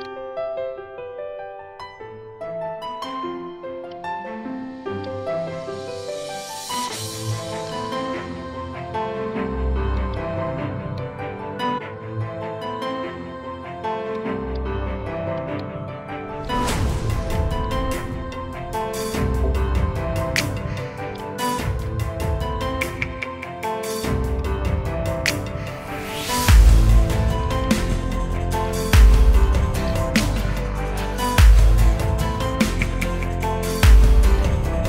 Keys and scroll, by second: 0.8 Escape, 1.3 ctrl+z, 2.0 t, 2.8 ctrl+v, 4.0-6.9 typing, 8.0 space, 11.1-14.2 typing, 16.3 space, 17.3-19.8 typing, 31.4 space.